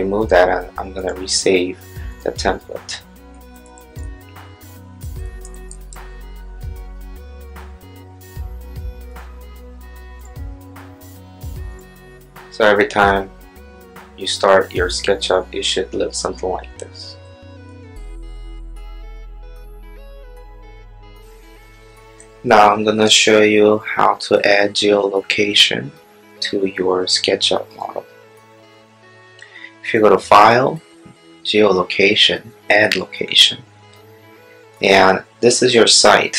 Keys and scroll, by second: 6.9 Tab.